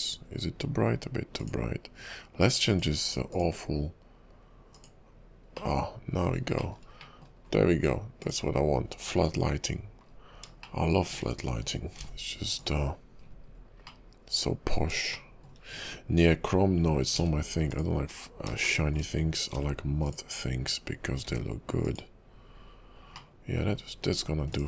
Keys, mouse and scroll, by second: 0.3 scroll up 2, 1.4 click, 2.7 click, 5.7 middle click, 6.7 shift+middle click, 7.1-8.2 scroll up 2, 7.2 middle click, 8.2 click, 10.2 scroll down 3, 10.7 shift+middle click, 11.9 alt+m, 13.4-14.0 scroll up 6, 14.0 middle click, 15.3 shift+middle click, 17.2 alt+m, 18.8 shift+middle click, 19.5 alt+m, 21.3 alt+m, 23.3 middle click, 23.9-24.3 scroll down 4, 24.5 click.